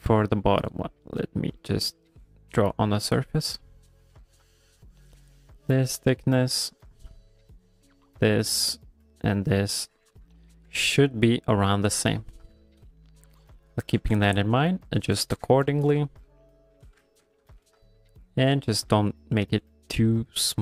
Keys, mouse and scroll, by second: 1.1 click, 2.6 middle click, 3.1 click, 4.5 click, 6.4 click, 7.4 click, 8.7 click, 9.4 click, 10.4 ctrl+middle click, 10.8 middle click, 11.9 middle click, 12.1 ctrl+middle click, 12.2 ctrl+middle click, 12.4 ctrl+middle click, 12.6 middle click, 13.0 shift+middle click, 13.2 shift+middle click, 13.3 middle click, 13.6 shift+middle click, 14.0 g, 14.2 f, 14.6 click, 15.5 ctrl+middle click, 15.8 ctrl+middle click, 16.1 shift+middle click, 16.5 click, 17.1 ctrl+middle click, 17.3 middle click, 17.6 f, 18.1 click, 18.5 middle click, 18.9 f, 19.3 click, 20.1 middle click, 20.5 ctrl+middle click.